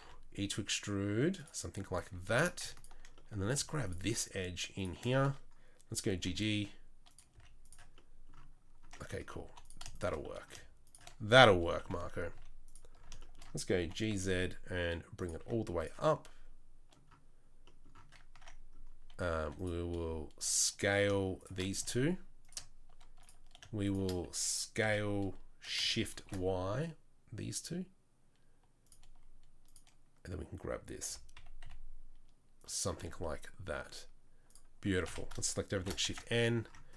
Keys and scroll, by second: 0.0 e, 2.2 2, 6.1 g, 7.3 z, 9.4 3, 11.8 KP_3, 12.3 z, 13.8 g, 15.4 z, 18.1 Tab, 18.3 Tab, 19.4 2, 21.8 a, 24.8 s, 31.1 g, 33.0 Tab, 34.8 Tab, 35.0 a, 35.8 shift+n, 36.1 Tab, 36.1 `.